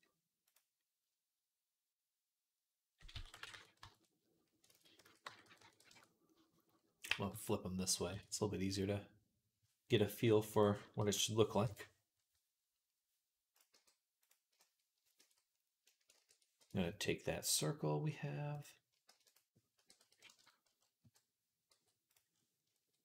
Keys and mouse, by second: 0.3 click, 3.0 s, 4.6 ctrl+z, 4.9 s, 6.9-9.7 middle drag, 6.9 g, 9.7-12.4 drag, 10.8 g, 13.6 g, 15.1 ctrl+s, 16.0 shift+a, 16.6-22.2 middle drag, 18.9-21.5 typing, 22.2-23.0 shift+drag.